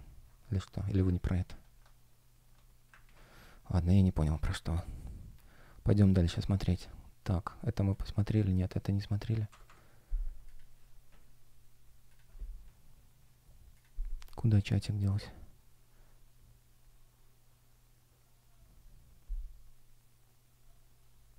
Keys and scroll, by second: 2.9 super+w, 9.4 Escape.